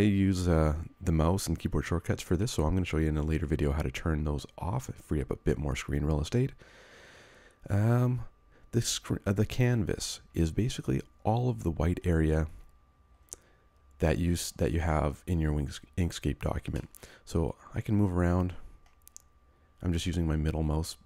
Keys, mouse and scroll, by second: 16.7 middle click.